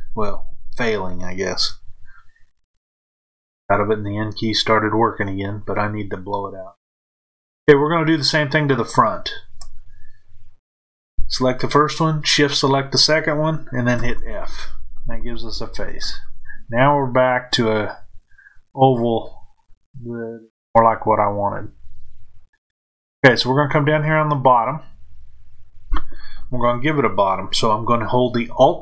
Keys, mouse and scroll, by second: 8.7 shift+click, 15.9-28.8 middle drag.